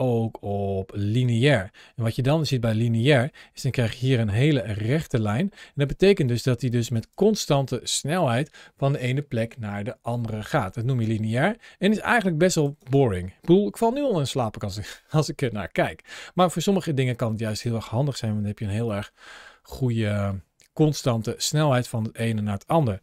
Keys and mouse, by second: 3.8 ctrl+shift+l, 6.1-6.5 drag, 10.9 space, 12.1-12.5 drag, 12.6 space, 17.3 space, 18.7-22.0 drag.